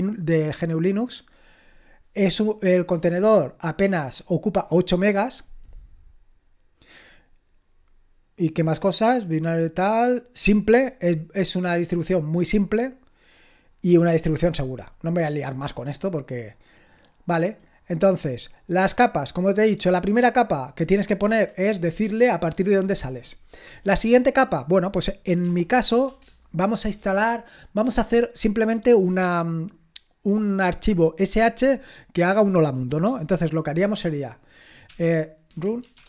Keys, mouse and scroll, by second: 16.5-18.0 drag, 18.0-19.9 scroll down 2, 20.0-21.2 drag, 21.2 Escape, 23.4-24.4 scroll down 1, 24.4-25.5 drag, 25.5-25.9 typing, 34.9-36.0 typing.